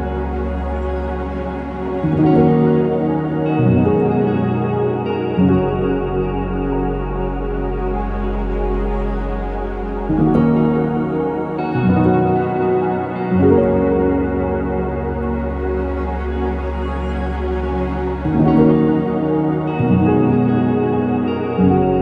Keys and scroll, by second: 0.0-1.8 typing, 4.1 BackSpace, 6.7 BackSpace, 8.8-10.4 typing, 11.4 Num_Lock, 11.6-13.1 typing, 17.3-21.1 typing, 21.6 ctrl+s.